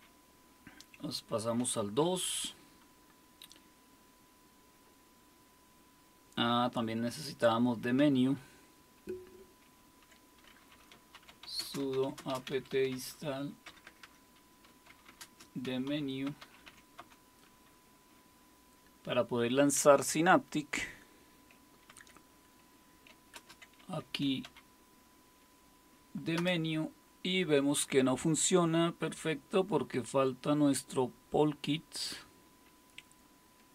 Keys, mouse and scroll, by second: 2.0 super+2, 9.6 super+1, 10.7-17.5 typing, 21.9 super+2, 23.3 super+space, 24.0-24.9 typing, 26.3 Return.